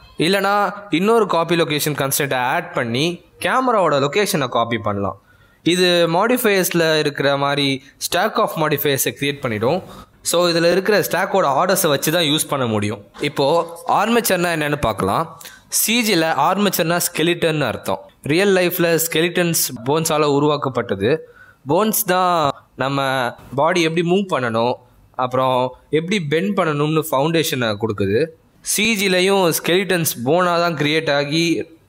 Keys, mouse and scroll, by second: 0.1 click, 1.3 click, 4.0 g, 7.8 click, 10.7 click, 13.0 click, 16.0 s, 16.7 r, 18.4 g, 20.0 r, 21.2 ctrl+Tab, 21.5 click, 21.9 r, 23.6 click, 24.0 r, 26.3 click, 26.9 r, 28.7 click, 29.0 r.